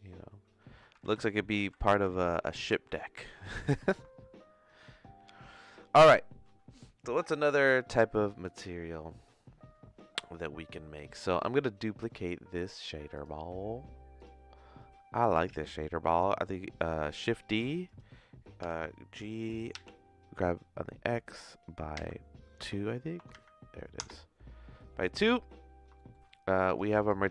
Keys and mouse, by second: 1.1 ctrl+z, 1.3 ctrl+z, 1.6 ctrl+z, 2.0 ctrl+z, 2.8 ctrl+shift+z, 3.8 ctrl+s, 17.2 shift+d, 18.6 g, 25.9 shift+middle click.